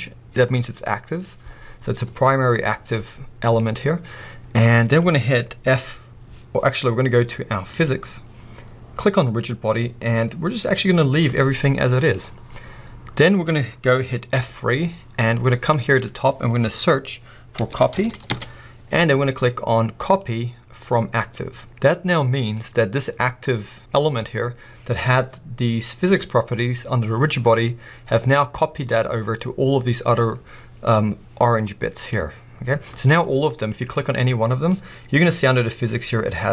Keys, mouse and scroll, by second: 7.7 click, 9.2-12.1 drag, 12.1-33.7 middle drag, 14.4 F3, 33.7 click.